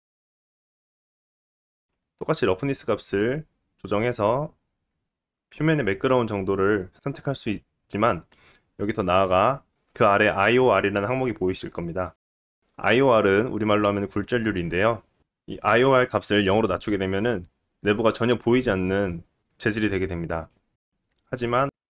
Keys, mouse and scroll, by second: 1.9-20.9 drag, 20.9-21.8 middle drag.